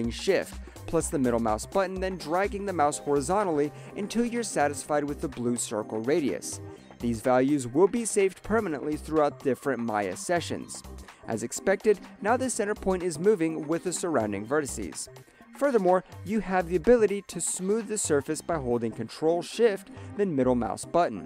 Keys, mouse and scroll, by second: 2.5 middle click, 5.7 shift+middle click, 9.1 alt+click, 10.1 middle click, 11.0 alt+click, 11.8 middle click, 13.1 alt+click, 13.8 middle click, 15.0 alt+click, 15.9 middle click, 17.4 alt+click, 17.5 alt+right click, 17.7 alt+middle click, 17.8 alt+click, 17.9 alt+right click, 18.2 alt+middle click, 18.8 ctrl+shift+middle click.